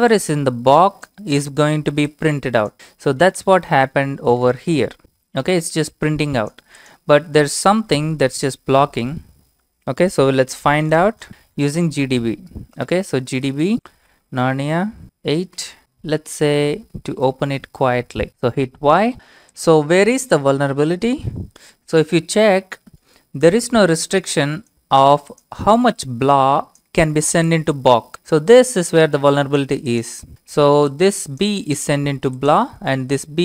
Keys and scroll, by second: 12.9-15.3 typing, 15.8-16.1 Left, 17.1-18.3 typing, 18.3 Return, 18.5 Return.